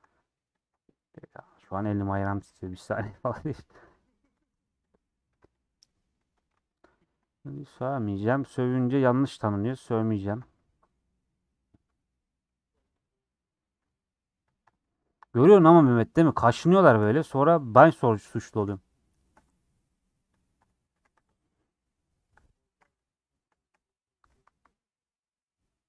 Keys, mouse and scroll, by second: 0.6 ctrl+click, 1.6 middle click, 2.3 3, 2.7 Left, 2.9-3.9 middle drag, 4.2 middle click, 4.5 3, 4.9 click, 5.3 2, 5.5 click, 5.9 middle click, 6.9 ctrl+click, 7.2-9.1 middle drag, 9.1 ctrl+click, 9.3-10.3 middle drag, 10.3 ctrl+click, 10.9-13.0 middle drag, 13.0 click, 13.2-14.5 middle drag, 14.5 ctrl+click, 14.8-15.9 middle drag, 20.9 a, 21.1 u, 22.3-23.8 middle drag, 23.8 scroll up 1, 24.1 3, 25.4 middle click.